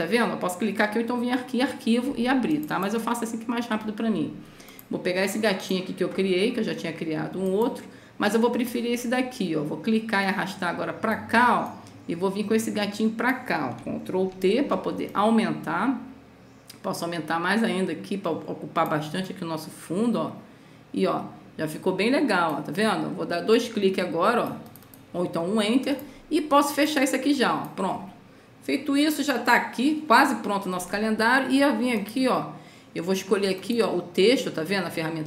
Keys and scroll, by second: 14.7 ctrl+t.